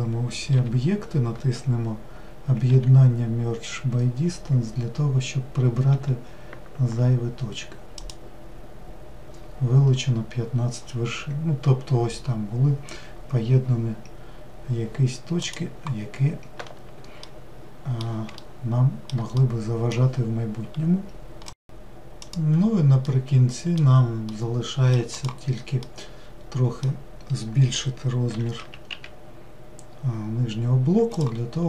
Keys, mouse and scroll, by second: 0.7 a, 15.5 click, 17.3-25.1 middle drag, 25.1 click, 25.8-29.2 middle drag.